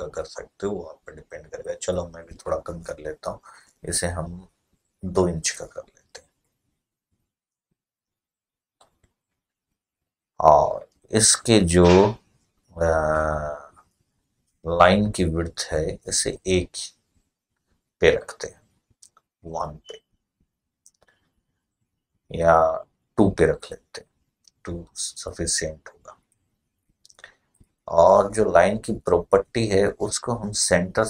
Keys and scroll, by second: 4.9 2, 5.3 Return.